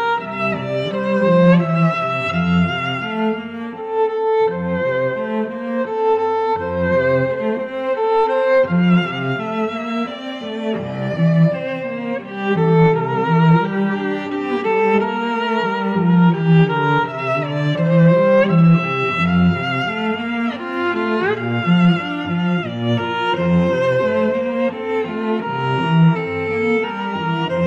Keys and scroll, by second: 7.7 i.